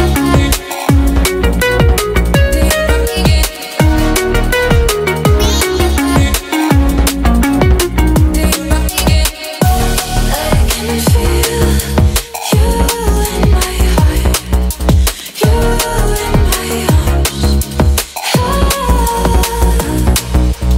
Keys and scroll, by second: 6.9 space.